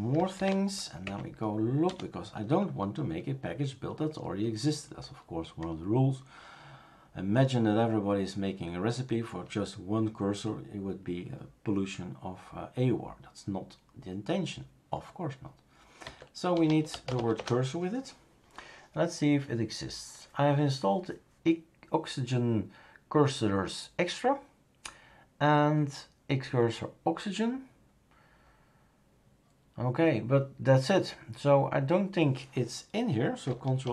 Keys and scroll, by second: 0.3 ctrl+c, 1.0 Up, 1.8 space, 15.8-17.6 typing, 33.8 ctrl+alt+m.